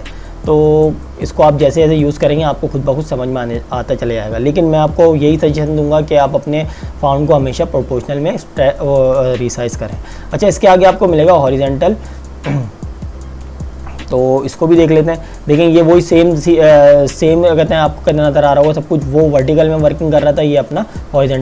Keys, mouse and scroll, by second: 9.8 click.